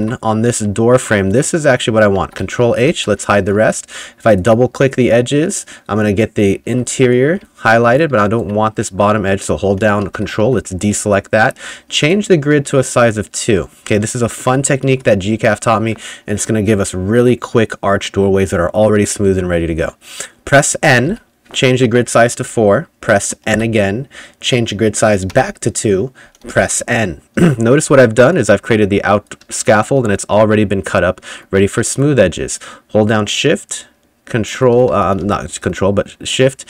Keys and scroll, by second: 0.0 alt+n, 2.3 ctrl+h, 2.8 2, 3.4 a, 3.7 w, 6.7 w, 7.0 s, 9.4-11.0 typing, 13.9 w, 14.6 w, 14.9 s, 15.5 d, 21.1 n, 22.5 ], 23.6 n, 25.3 [, 26.6 n, 27.4 w, 27.9 d, 29.2-31.4 typing, 34.5-35.8 typing.